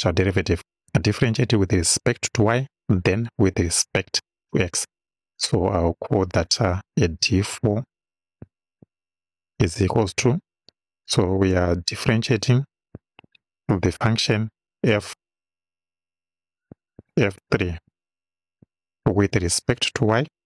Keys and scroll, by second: 7.5 d, 8.8 4, 9.8 =, 11.1 d, 11.6 i, 13.0 shift+f, 13.3 shift+9, 14.9 f, 16.0 1, 16.8 BackSpace, 17.2 3, 18.6 ,.